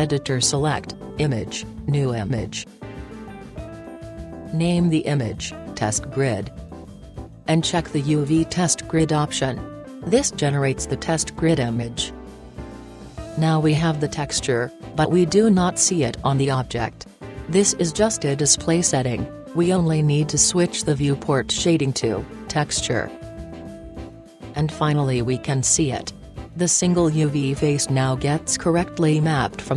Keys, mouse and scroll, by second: 21.6-27.3 drag, 27.5-29.7 middle drag.